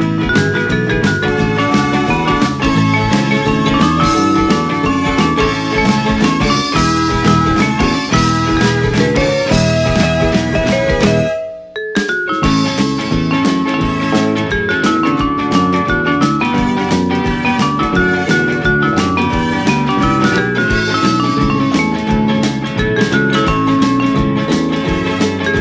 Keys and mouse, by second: 0.3 click, 0.8 g, 2.0 click, 2.5 r, 3.4 click, 3.9 g, 4.5 click, 5.0 r, 6.0 click, 6.3 Tab, 7.2 click, 11.1 click, 11.7 Tab, 13.3 Tab, 14.3 click, 15.4 click, 16.6 click, 18.5 click, 20.4 click, 20.9 Tab, 21.9 a, 22.4 ctrl+a, 23.2 click, 23.4 alt+z, 23.9 click, 24.8 g, 25.5 x.